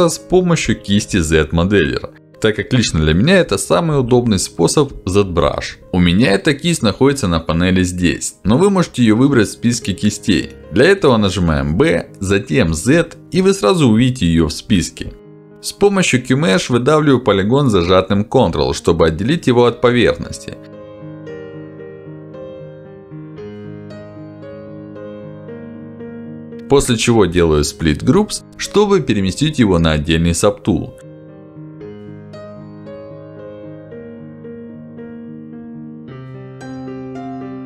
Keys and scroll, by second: 7.0 Escape, 9.8 Escape, 11.1 b, 30.4 Escape.